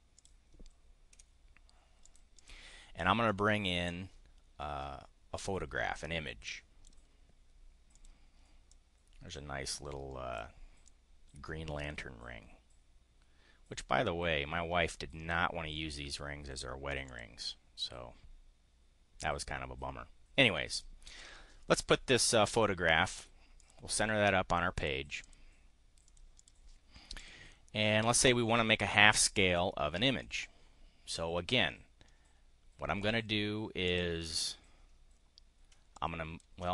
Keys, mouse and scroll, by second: 0.0 click, 1.1 Delete, 2.0 click, 3.2 click, 6.5 click, 7.7 click, 8.6-10.4 drag, 10.8-15.3 drag, 17.0 click, 20.6 click, 23.5 click, 24.7 click, 25.2 click, 26.1 click, 27.2 click, 30.1-30.6 drag, 33.8 click, 35.9 ctrl+click.